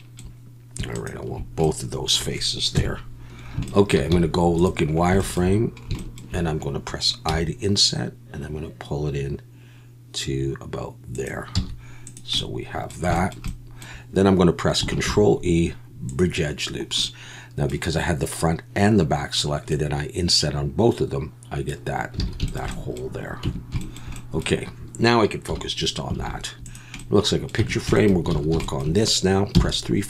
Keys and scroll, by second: 2.7 KP_1, 4.1 z, 11.5 z, 15.0 ctrl+e, 22.3 alt+a, 23.4 Tab, 25.5 /, 26.2 alt+a, 27.6 Tab, 28.3 alt+a, 29.5 3.